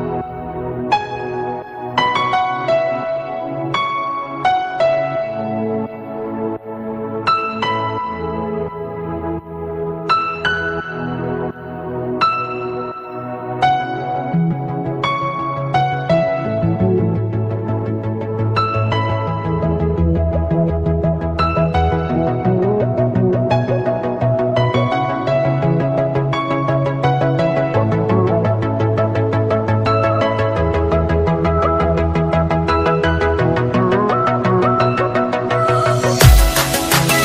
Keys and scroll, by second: 1.3 ctrl+space, 7.3 ctrl+space.